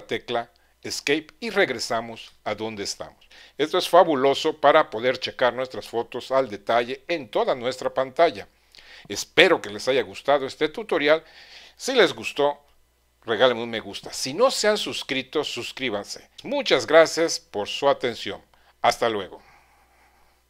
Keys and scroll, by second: 0.9 ⟲.